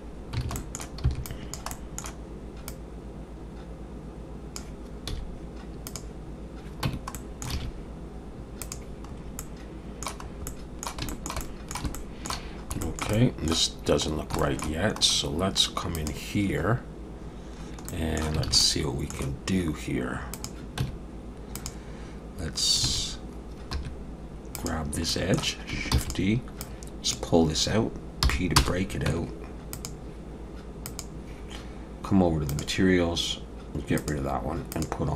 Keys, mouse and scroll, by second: 0.4 alt+a, 0.6 middle click, 1.0 b, 1.7 middle click, 2.7 click, 5.1 z, 6.8 Tab, 7.1 middle click, 7.5 alt+a, 8.6 click, 9.1-9.4 scroll up 3, 9.4 middle click, 10.3 scroll up 2, 10.4 middle click, 11.1 shift+middle click, 11.4 middle click, 11.9 shift+middle click, 12.5 scroll up 1, 12.8 shift+middle click, 13.1 middle click, 14.1 scroll down 1, 14.4 shift+middle click, 15.0 scroll up 1, 15.5 scroll up 1, 15.9 click, 17.9 middle click, 18.5 alt+a, 18.6 middle click, 20.3 click, 20.8 Tab, 21.5 click, 22.9 alt+a, 23.7 2, 24.6 click, 25.1 middle click, 25.9 shift+d, 26.6 click, 28.2 p, 29.1 Tab, 29.7 click, 30.8 click, 34.0 click, 34.7 click.